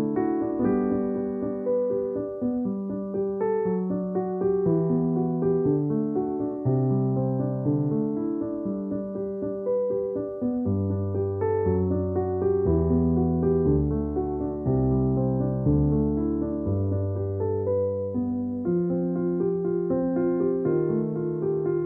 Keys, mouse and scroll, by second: 1.9 click, 3.4 alt+u, 4.8-5.9 scroll up 1, 6.1 click, 10.4 space, 10.7 click, 10.8 space, 11.6 click, 12.0 space, 12.1 click, 12.4 space, 19.2 click, 20.2-21.8 typing.